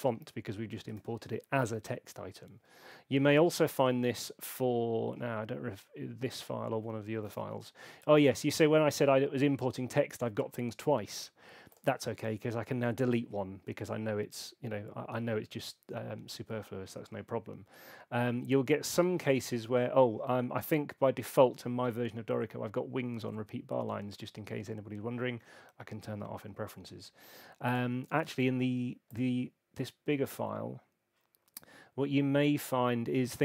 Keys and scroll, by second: 0.9 super+8.